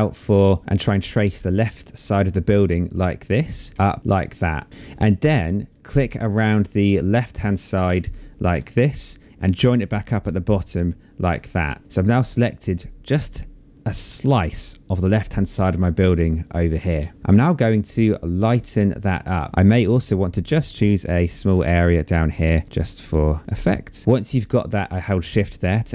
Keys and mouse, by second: 1.3 shift+click, 3.7 shift+click, 4.7 shift+click, 6.1 shift+click, 7.0 space, 7.2 click, 8.1 click, 10.3 Escape, 20.0 shift+click.